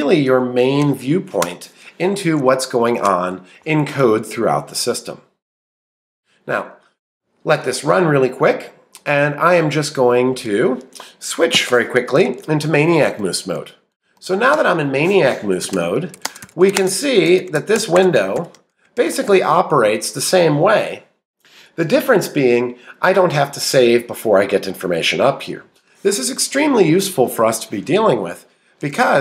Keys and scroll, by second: 0.6 shift+Down, 11.5 ctrl+', 13.0 Up, 13.2 Right, 14.5 Return, 15.3-20.2 typing.